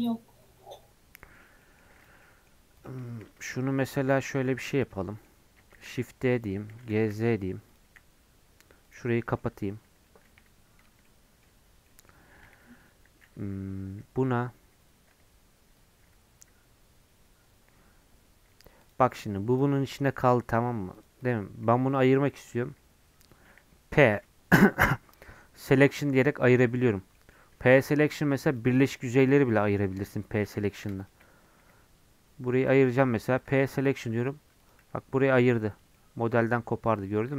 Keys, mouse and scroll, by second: 1.0-1.6 scroll up 3, 1.2 middle click, 1.6 middle click, 2.0 click, 2.2 middle click, 2.8 click, 3.0 shift+middle click, 3.4 Tab, 3.7 Tab, 3.9 middle click, 4.2 Tab, 4.5 3, 4.7 click, 5.0 middle click, 5.3 scroll up 1, 5.7 shift+d, 6.7 g, 9.1 middle click, 9.5 Tab, 9.8 Tab, 10.2 1, 10.8 Tab, 11.0 middle click, 11.4 Tab, 11.6 scroll up 2, 11.9-14.9 middle drag, 18.5 Tab, 18.8 click, 19.1 scroll down 2, 19.2 middle click, 19.5 click, 19.7 middle click, 20.0 scroll up 1, 20.3 Tab, 20.9 click, 21.6 3, 21.9 click, 22.6 g, 24.1 p, 27.0 Tab, 27.1 middle click, 27.4 Tab, 27.7 3, 28.0-31.6 drag, 31.6 [, 32.7 [, 33.0 p, 33.7 Tab, 34.2 click, 34.8 g, 35.9 middle click, 36.3 g, 37.1 middle click.